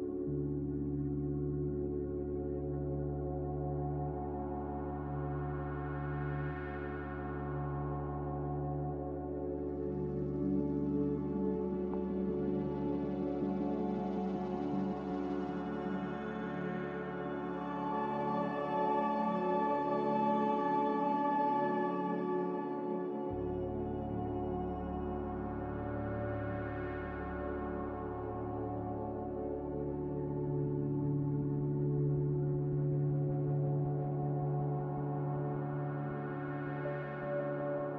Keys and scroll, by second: 11.1 Delete.